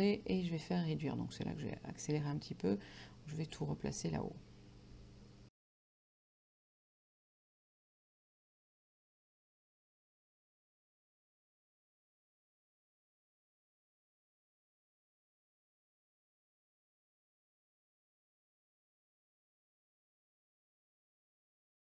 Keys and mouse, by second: 9.7 click, 10.9 click, 11.3 click, 15.6 click, 16.3 click, 16.5 click, 17.5 click, 17.7 KP_9, 17.9 Return, 18.2 click, 18.9 Down, 19.4 click, 21.0 click, 21.2 click.